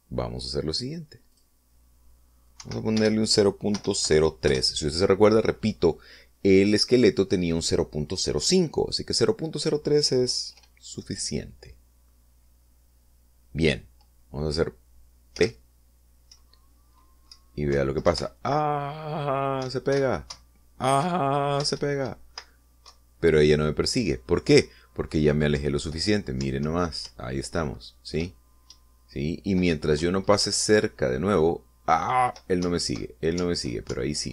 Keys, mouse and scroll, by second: 0.1 click, 2.5 click, 3.8 Right, 4.1 BackSpace, 4.9 0, 5.2 3, 5.7 Return, 16.5 p, 17.5 Right, 19.3 Up, 20.8 Right, 21.5 Up, 22.2 Left, 22.9 Right, 24.0 Left, 27.6 Up, 29.9 Down, 30.9 Left, 31.6 Up.